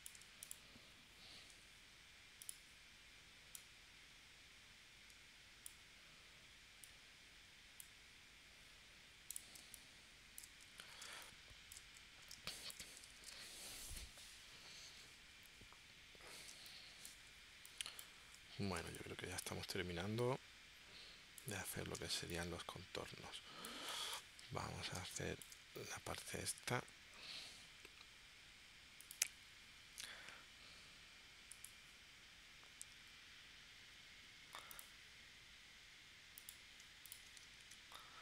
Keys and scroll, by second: 1.5 a, 9.6 space, 11.0 space, 12.3 space, 13.2 super+s, 16.5 space, 18.8 space, 22.3 space, 24.9 space, 27.2 p, 37.6 shift+c.